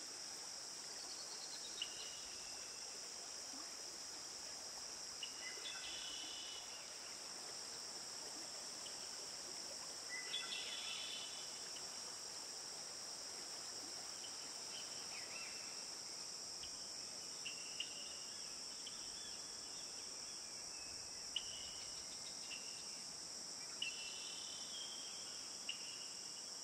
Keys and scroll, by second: 1.8 ctrl+t.